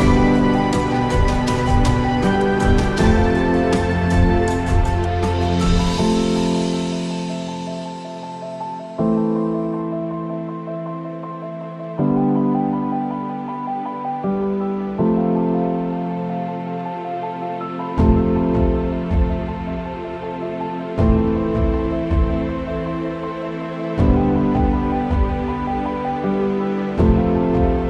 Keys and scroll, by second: 4.1 ctrl+z, 4.2 ctrl+z, 6.3 ctrl+z, 7.0 ctrl+z, 12.4 ctrl+z, 15.3 KP_0, 15.8 KP_0, 19.1 ctrl+z, 19.3 ctrl+z, 20.0 ctrl+z, 20.5 ctrl+z, 21.0 ctrl+z, 21.5 ctrl+z, 22.0 ctrl+z, 22.3 ctrl+z, 22.5 ctrl+z, 23.5 ctrl+z, 23.6 ctrl+z, 24.4 ctrl+z, 24.9 ctrl+z, 26.9 Tab.